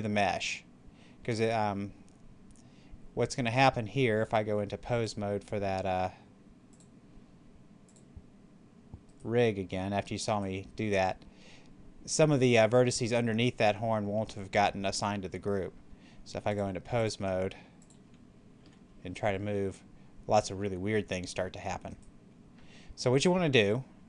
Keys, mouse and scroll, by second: 5.0 click, 9.0 right click, 16.4 click, 18.5 r, 21.8 right click.